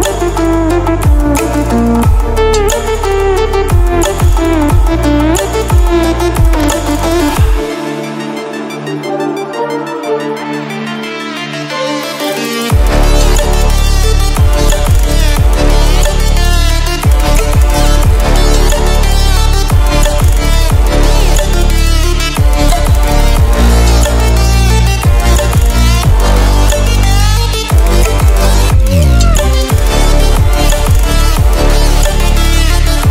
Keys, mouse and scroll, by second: 2.4 ctrl+w, 3.5-5.3 drag, 6.7 ctrl+alt+scroll up 1, 8.6 click, 9.8 right click, 12.0 click, 21.3 ctrl+alt+scroll up 1, 23.2-26.3 drag, 30.1 ctrl+alt+scroll down 1, 32.3-32.9 drag.